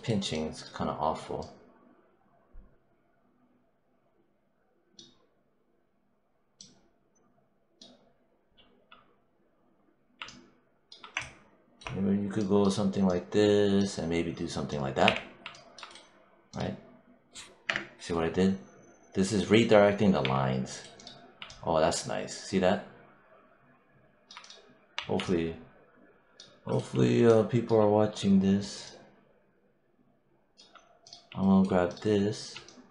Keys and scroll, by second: 14.9 w, 17.5 BackSpace, 20.1 3, 24.8 1.